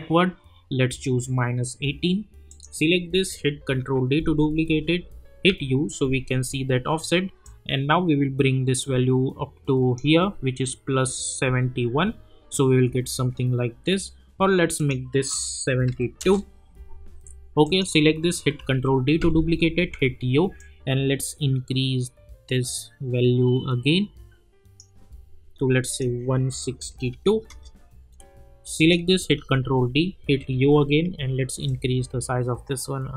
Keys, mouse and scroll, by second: 2.5 click, 3.7 ctrl+d, 5.5 u, 7.4-10.2 drag, 16.2 Return, 17.6 click, 18.6 ctrl+d, 19.8 u, 20.6-24.9 drag, 27.5 Return, 28.8 click, 29.3 ctrl+d, 30.4 u, 31.6-33.1 drag.